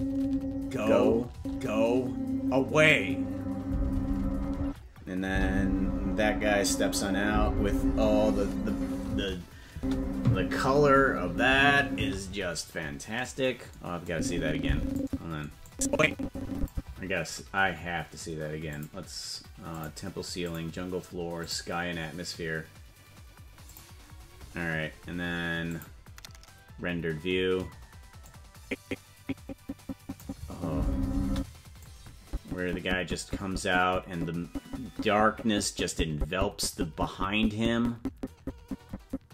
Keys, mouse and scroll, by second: 1.1 space, 1.3 space, 4.6 space, 5.2 space, 9.1 space, 12.0 space, 14.0 click, 15.7-16.7 drag, 18.7 click, 20.0 click, 22.5 click, 23.7 click, 26.1 click, 28.7-31.0 drag, 30.6 space, 31.5 space, 32.3-39.3 drag.